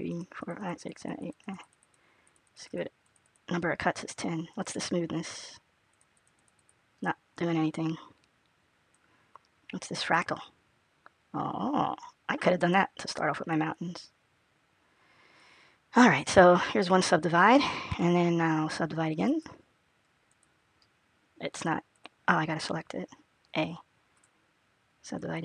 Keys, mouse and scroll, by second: 0.4 click, 1.4 click, 2.1 click, 2.9 click, 5.8-6.4 click, 7.6 click, 10.4 click, 16.6 click, 19.1 right click, 21.8 click, 23.2 a, 24.0 right click.